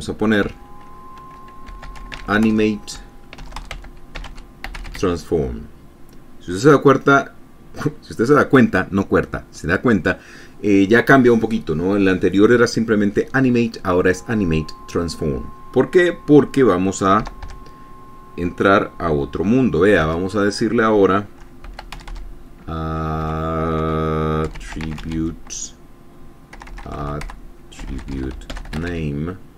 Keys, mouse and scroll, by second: 0.9 <, 1.9-5.8 typing, 17.7 Return, 17.9 Tab, 20.5 Tab, 21.8-27.0 typing, 28.0-29.5 typing.